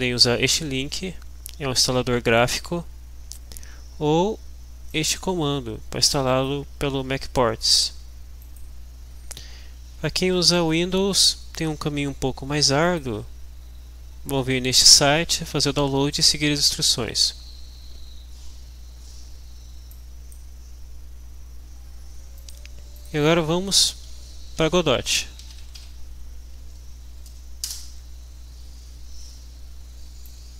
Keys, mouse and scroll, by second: 2.8-3.2 scroll down 2, 5.0-6.8 drag, 8.4 click, 9.3-10.3 scroll down 4, 10.6 scroll down 2, 12.8 click, 15.8 scroll down 2, 16.8 scroll up 2, 19.9 click, 22.4 click, 23.0 click, 25.2-26.3 typing, 27.0 Down, 28.1 Return, 30.3-30.5 drag.